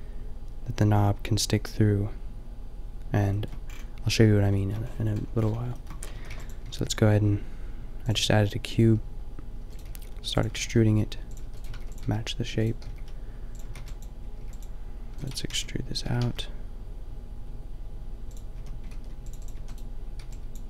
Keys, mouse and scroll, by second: 3.2 middle click, 3.9 middle click, 6.1 a, 6.3 b, 6.6 g, 8.2 click, 9.6-16.0 typing, 18.4 click, 18.6 a, 19.0 ctrl+r, 19.6 a, 20.3 b.